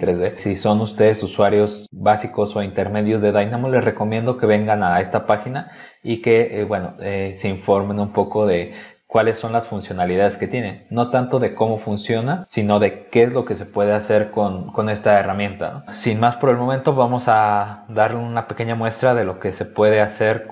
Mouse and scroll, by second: 0.9-1.3 scroll up 2, 1.6 middle click, 2.0 middle click, 2.6 middle click, 3.0 middle click, 3.5-3.9 scroll up 2, 16.8 click, 18.2 click, 19.8 click.